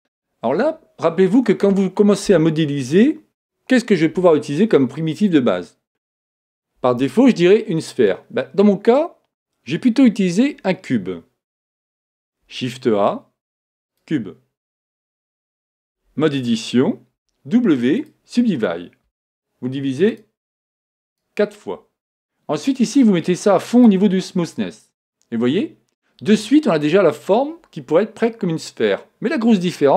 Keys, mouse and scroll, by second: 15.8 Tab, 17.3 w, 20.1-22.8 drag, 22.9-24.8 drag.